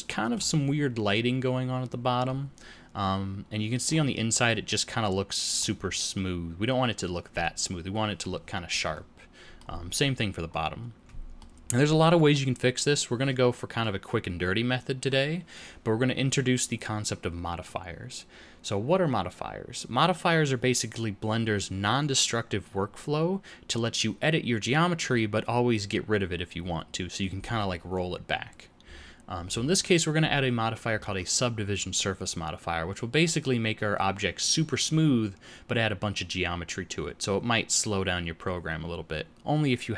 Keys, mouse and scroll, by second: 2.2 middle click, 4.4 middle click, 6.1 middle click, 8.9 middle click, 10.4 middle click.